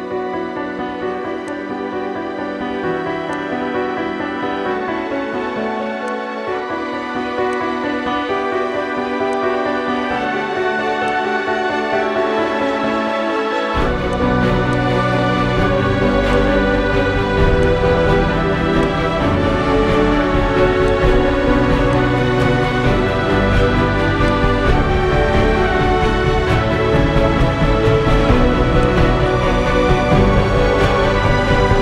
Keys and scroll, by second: 30.6 ctrl+i.